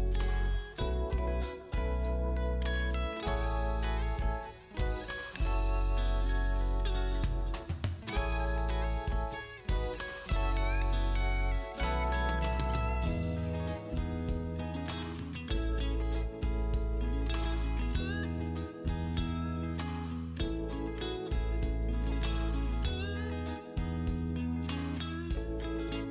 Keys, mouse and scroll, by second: 0.7 click, 1.9 right click, 2.5 click, 7.1 click, 9.2 g, 9.9 click, 14.2 ctrl+z, 15.4 click, 18.3 KP_7, 20.4 click, 22.3 KP_6, 22.8 KP_Enter, 24.8 click.